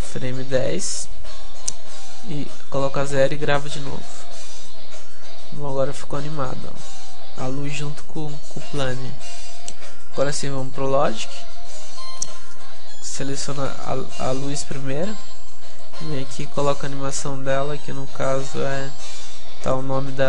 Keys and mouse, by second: 5.8-7.5 drag.